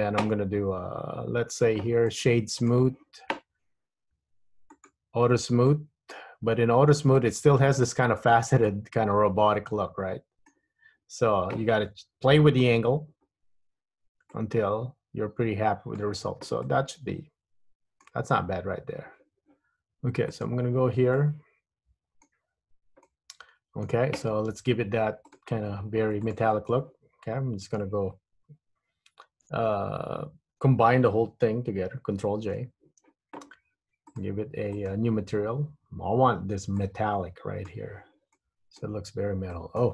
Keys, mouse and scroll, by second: 2.2 right click, 4.9 click, 5.8 middle click, 6.6-7.4 scroll up 3, 7.4 middle click, 7.4 scroll down 1, 8.8 middle click, 14.4 click, 16.7 middle click, 18.4-19.4 scroll down 5, 20.4 click, 21.3 middle click, 22.8-23.2 scroll up 1, 23.2 middle click, 25.5 shift+click, 26.3 shift+click, 27.8 right click, 32.4 ctrl+j, 34.2 click, 34.8 click, 36.9 click, 38.4 middle click, 39.2-39.6 scroll up 4, 39.6 middle click.